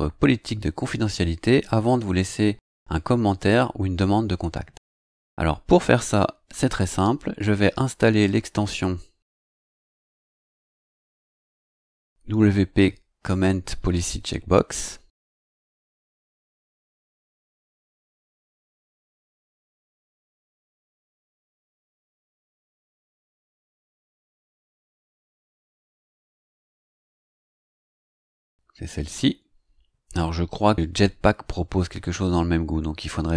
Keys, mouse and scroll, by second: 9.6 click, 13.2 click, 15.4-18.9 typing, 25.4-25.7 scroll down 2, 26.6-26.9 scroll up 2.